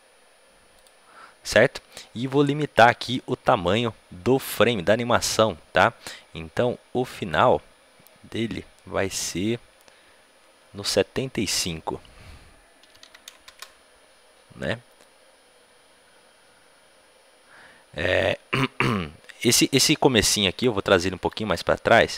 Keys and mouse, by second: 0.7-13.4 drag, 15.0-17.0 drag, 19.6-22.1 drag.